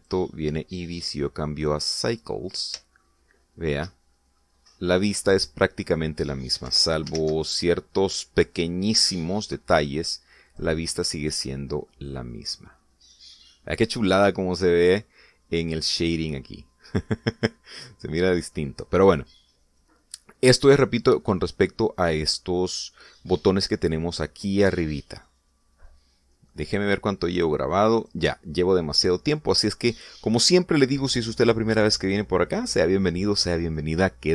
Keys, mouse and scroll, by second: 0.0 click, 1.0 click, 1.9 click, 4.0-5.0 shift+middle drag, 5.4 scroll up 1, 7.7 shift+z, 11.5 click, 12.9-14.6 middle drag, 14.6 scroll up 1, 15.0-16.2 middle drag, 16.2 scroll up 1, 17.2 scroll down 1, 17.4-19.5 middle drag, 28.4 click, 29.1 click, 30.2-30.5 scroll down 1, 30.6-31.6 middle drag.